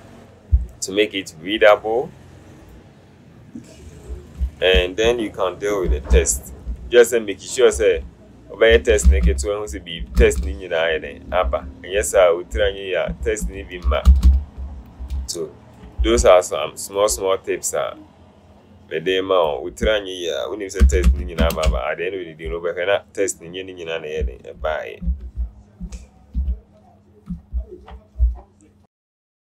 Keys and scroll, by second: 4.6 ctrl+a, 6.0 Left, 6.2 Left, 6.4 Left, 6.6 Left, 6.8 Left, 7.8 alt+Up, 8.8 alt+Up, 9.3 Up, 10.1 alt+Left, 11.5 alt+Down, 12.0 Down, 12.6 Down, 13.5 alt+Left, 14.2 Right, 14.4 Right, 15.1 Right, 20.9 KP_2, 21.1 KP_5, 21.6 Return, 25.1 alt+Up, 25.9 Up, 26.4 Right.